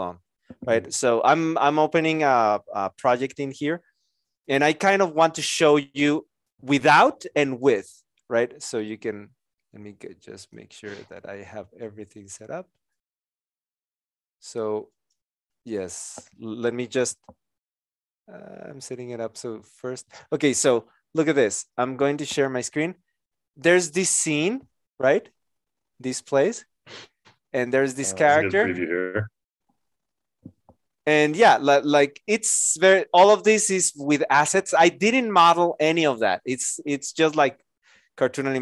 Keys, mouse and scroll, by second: 23.1 Return.